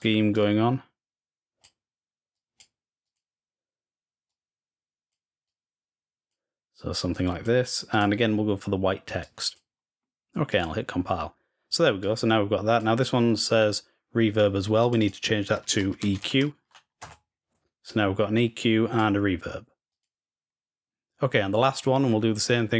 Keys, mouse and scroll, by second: 0.1-1.4 drag, 2.1 click, 4.0 click, 5.2-6.5 drag, 6.9 click, 7.7 click, 9.0 click, 10.3 click, 11.8-12.6 drag, 14.6 click, 17.6-18.8 drag, 19.7 click, 21.7 scroll down 1, 22.6-22.7 drag.